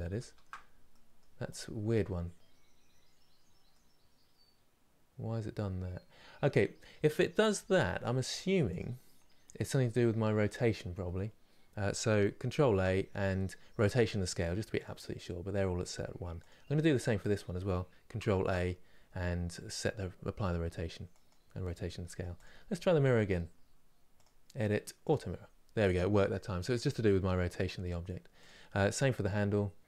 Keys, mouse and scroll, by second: 0.6 middle click, 1.2 click, 3.4-7.3 middle drag, 11.2 click, 14.5 ctrl+a, 16.1 click, 20.9 ctrl+a, 21.7 middle click, 22.1 click, 24.7 click, 25.5-28.1 middle drag, 28.1 click.